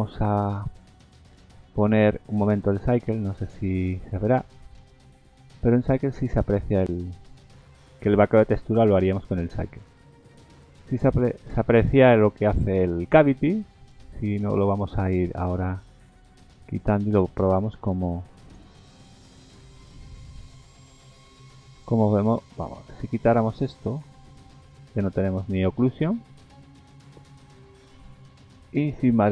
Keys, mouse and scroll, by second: 4.1-4.9 scroll up 5, 4.9 click, 15.6-15.9 scroll down 2, 18.0 click, 20.6 click, 22.3 click, 23.5 click.